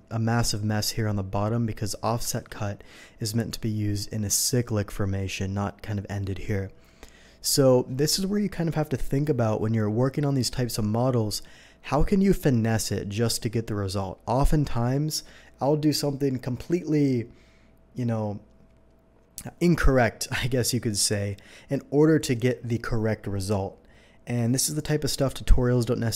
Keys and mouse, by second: 2.3 ctrl+z.